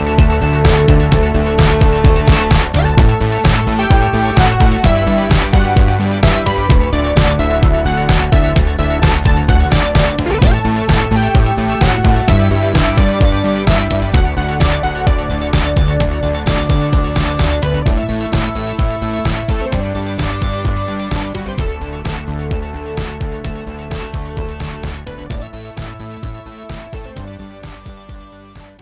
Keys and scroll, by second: 3.2 g, 10.8 g, 16.2 w, 21.2 w.